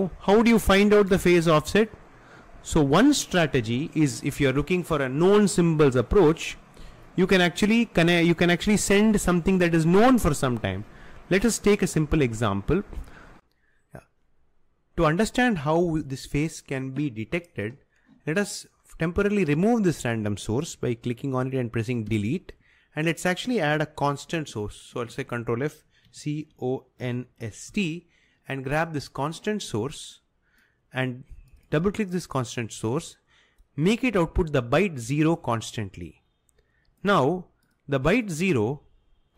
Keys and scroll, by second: 22.2 Delete, 25.2 ctrl+f, 26.0-28.2 typing.